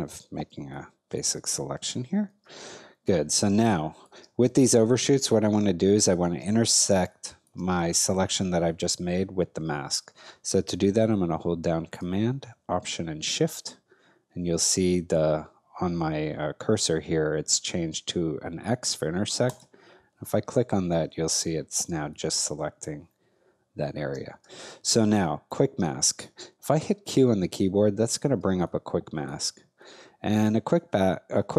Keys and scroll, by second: 0.5 space, 3.5 space, 5.2 space, 6.8 space, 21.9 space, 24.4 space, 26.8 q, 28.4 space.